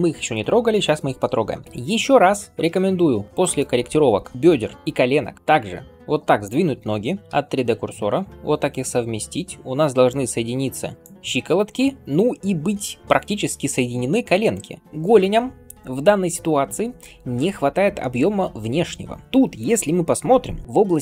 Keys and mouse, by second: 3.3 shift+click, 3.4-7.2 shift+middle drag, 7.2 r, 11.2-21.0 middle drag, 20.6 d.